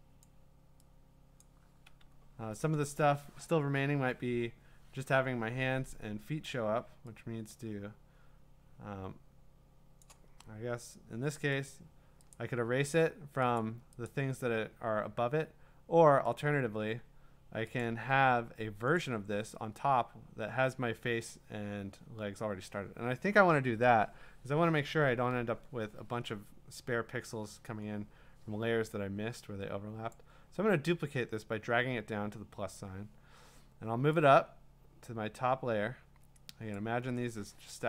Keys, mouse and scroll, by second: 0.2 click, 1.4 click, 10.0 click, 10.3-10.8 scroll, 10.9 middle click, 11.7 click, 12.3 click, 13.6 click, 14.1 click, 16.4 click, 17.8 click, 19.0 click, 19.5-20.8 scroll, 30.1 click, 30.7 scroll, 36.7 click.